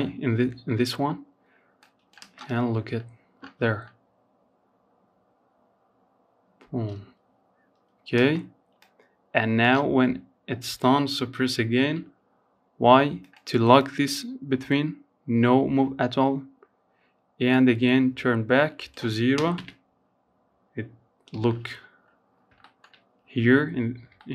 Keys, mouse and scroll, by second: 0.0 click, 0.4 space, 6.3 space, 7.0-10.0 drag, 10.0 i, 11.4-15.0 drag, 16.9-19.5 drag, 20.4-20.8 scroll down 2, 20.8-22.7 shift+middle drag, 22.7-23.1 scroll up 2, 23.1-24.3 shift+middle drag.